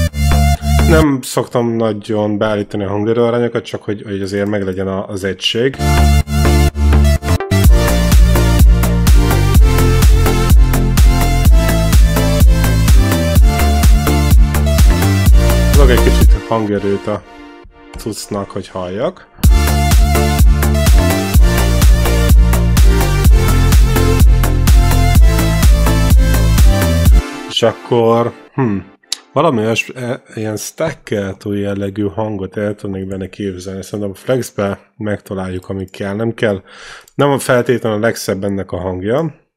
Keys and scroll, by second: 0.9 space, 5.5 space, 16.1 space, 19.2 space, 27.0 space.